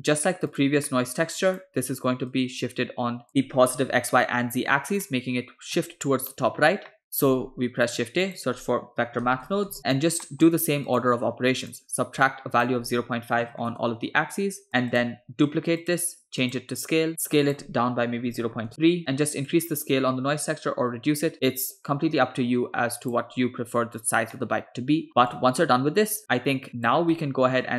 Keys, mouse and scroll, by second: 0.9 middle click, 1.4-1.7 drag, 2.3 click, 3.3 middle click, 5.1-5.8 middle drag, 6.9 middle click, 7.4 shift+a, 10.2 middle click, 10.9-11.8 drag, 12.2-13.7 shift+drag, 14.9 click, 15.4 shift+d, 16.4-17.1 drag, 17.1 middle click, 17.5-18.7 drag, 19.5-23.3 drag, 24.3-25.1 middle drag, 25.1 scroll down 2, 25.3-27.0 drag, 27.2 middle click.